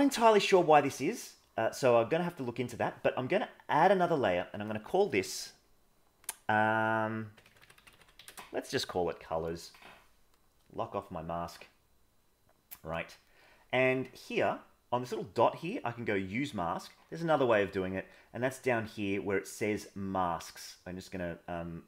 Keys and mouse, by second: 4.5-8.3 drag, 19.5 click.